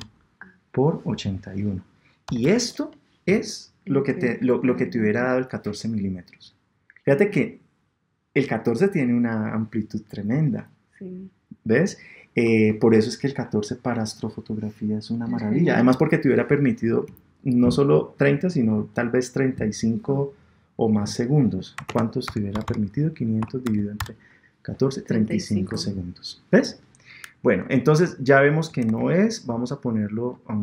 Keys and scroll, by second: 28.9 super+Tab.